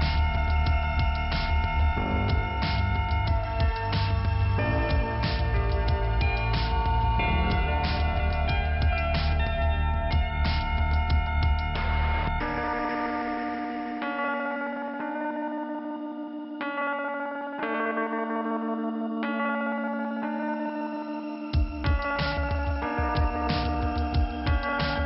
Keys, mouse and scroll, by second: 1.9 middle click, 2.6-3.1 scroll up 1, 3.7 click, 4.6 click, 4.7 click, 6.4 click, 10.7-11.6 scroll down 2, 11.6 k, 13.5 click, 14.5 click, 14.7 click, 14.9 scroll up 1, 19.8 click, 20.9 click, 21.7 click, 24.9 click.